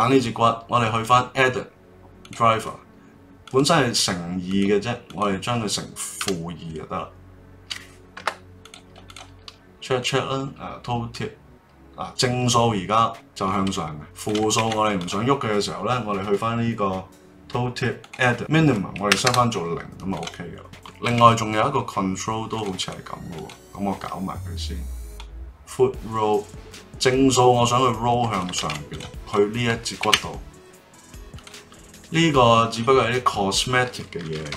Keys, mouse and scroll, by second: 1.0-4.0 right drag, 9.1 drag, 11.1-13.2 drag, 14.5 ctrl+z, 15.0 click, 18.0-20.2 drag, 21.0 ctrl+Tab, 22.8 click, 23.3 click, 25.1-28.2 drag, 28.6 ctrl+z, 28.9 drag, 29.2 click, 30.0 ctrl+Tab, 30.4-34.5 right drag.